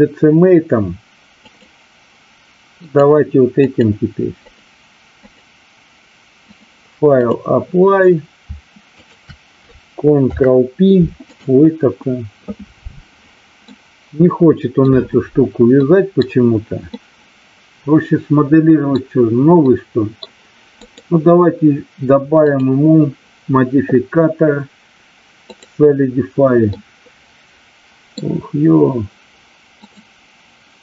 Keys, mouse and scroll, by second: 1.4 click, 2.8 click, 3.6 click, 4.4 click, 5.2 click, 6.6 click, 13.7-14.8 middle drag, 15.8-16.2 middle drag, 16.9-18.9 middle drag, 19.6-20.2 middle drag, 22.4-25.6 drag, 26.7-28.0 middle drag.